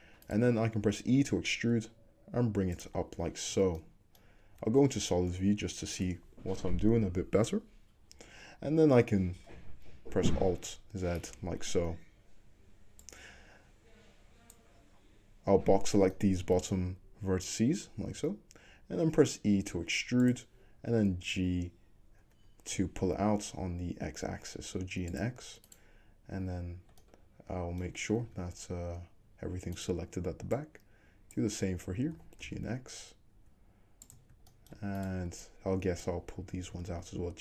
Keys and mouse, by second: 1.0-2.8 drag, 1.0 e, 2.8-11.3 middle drag, 4.6 z, 5.5 `, 8.3-20.3 drag, 10.5 alt+z, 11.3-13.1 middle drag, 18.2 e, 20.3-25.7 middle drag, 21.0 g, 25.7 click, 25.8-29.8 middle drag, 28.3 `, 29.8 click, 29.9 middle click, 30.7-34.2 drag, 32.2 g, 34.2 shift+middle click, 35.0 click, 35.1 middle click, 35.5-37.4 drag, 36.7 g.